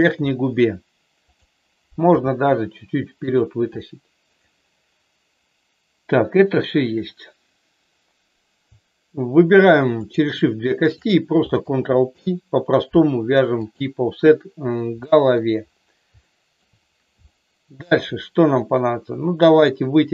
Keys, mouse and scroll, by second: 1.1 click, 2.1 g, 3.3 click, 4.3 click, 10.0 shift+click, 10.9 shift+click, 12.1 ctrl+p, 15.0 shift+middle click, 16.1 shift+middle click, 17.3 shift+middle click.